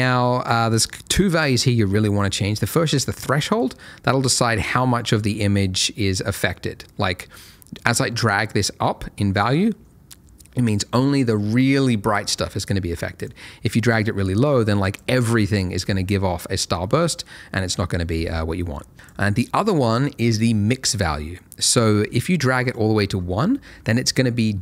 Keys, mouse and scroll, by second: 4.1 click, 13.2 click, 18.9 click, 22.0 click.